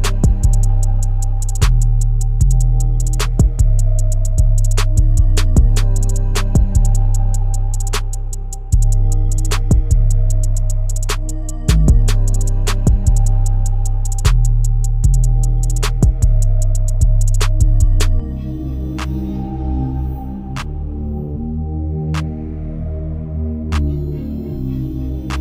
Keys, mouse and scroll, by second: 1.2-1.7 scroll up 1, 1.7 shift+middle click, 2.0-2.9 scroll up 1, 2.9 middle click, 3.8 Tab, 4.2 click, 4.8 Tab, 5.1 click, 5.3 Tab, 6.5 click, 7.2 click, 7.6 Tab, 8.0 Tab, 8.3-8.7 scroll down 1, 8.7-9.7 shift+middle drag, 9.7-10.5 scroll down 3, 11.3 g, 13.5 e, 16.0-17.0 middle drag, 17.0 Tab, 17.6 s, 19.5 middle click, 20.1 Tab, 20.6 click, 21.5 ctrl+b.